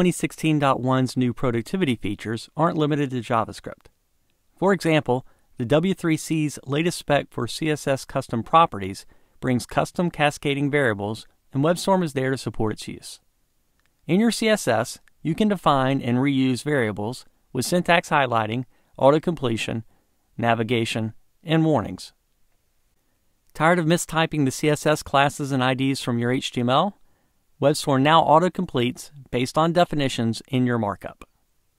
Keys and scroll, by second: 15.2 super+v, 17.4 Tab, 30.3 Tab.